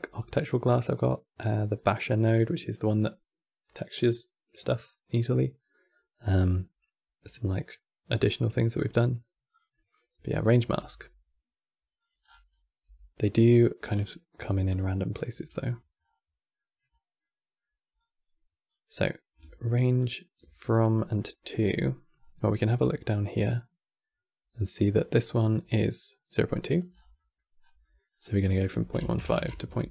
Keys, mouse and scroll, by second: 10.5 g, 12.0-12.5 scroll down 9, 12.5 g, 14.1 g, 14.7 middle click, 15.1 g, 15.7-16.3 scroll up 8, 16.3 middle click, 16.6-16.9 scroll up 4, 16.9 middle click, 17.7-18.7 drag, 18.7-19.7 scroll up 2, 19.7 shift+click, 20.9 middle click, 21.3 scroll down 6, 21.5 middle click, 21.9 scroll up 3, 22.6 middle click, 23.0-23.4 scroll up 5, 24.3 click, 26.4 click, 26.6 scroll down 5, 26.9 middle click, 27.3-28.1 scroll up 9, 27.5 middle click, 28.1-29.9 drag.